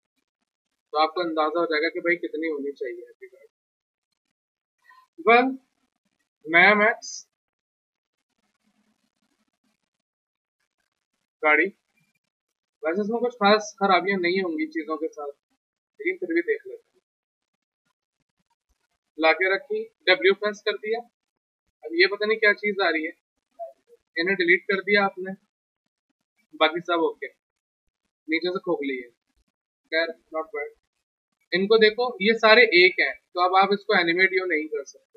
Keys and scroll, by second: 3.1 w, 4.2 Delete, 10.0 Delete, 10.6 alt+Tab, 19.6 w, 23.7 Delete, 30.0 w, 32.9 e, 35.0 ctrl+z.